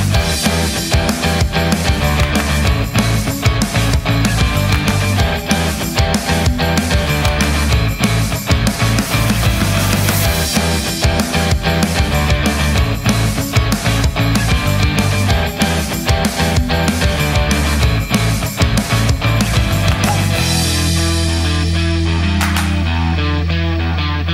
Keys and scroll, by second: 0.8-1.9 typing, 4.7-9.9 typing, 11.1 super+a, 11.6-14.0 typing, 14.7 super+a, 15.6-19.8 typing.